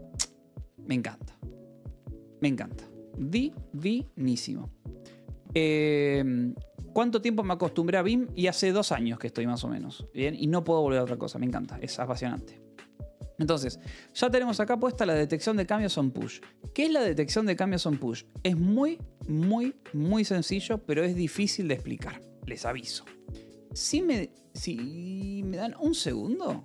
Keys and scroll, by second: 2.4 j, 3.2 k, 3.9 k, 4.4 j, 11.9-13.0 typing, 16.2 Escape, 22.7 x, 26.5 Return.